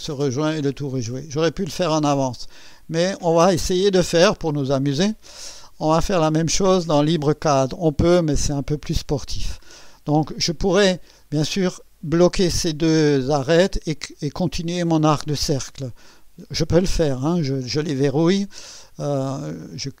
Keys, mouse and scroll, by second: 4.0 click, 6.2 click, 8.1 click, 9.6 scroll up 2.